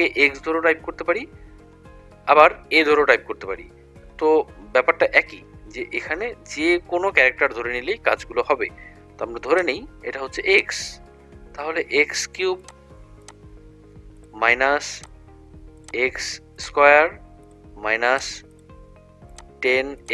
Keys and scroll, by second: 10.6 ), 14.3 -, 15.9 ), 17.6 -, 18.2 1, 18.6 0, 20.0 ).